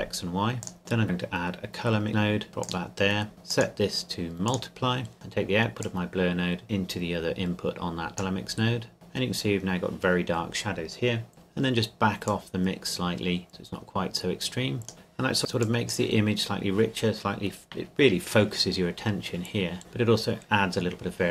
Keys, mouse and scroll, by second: 0.6 click, 1.0 click, 12.3 click, 15.8 click, 16.3-18.3 scroll up 1.